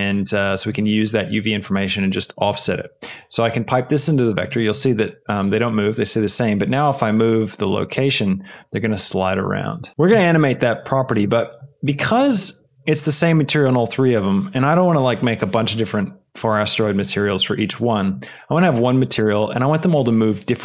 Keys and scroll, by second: 9.9 Return, 9.9 KP_0.